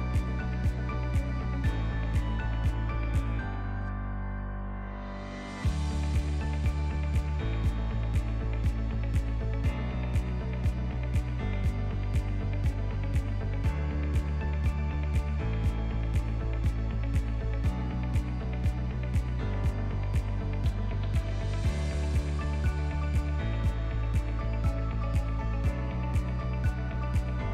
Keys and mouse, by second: 5.3 click, 6.5-7.9 drag, 9.0-12.0 middle drag, 12.2 click, 12.6 g, 14.2 s, 16.3 ctrl+click, 16.9-17.6 drag, 17.6-18.6 middle drag, 21.8-22.9 drag, 23.7-24.5 drag.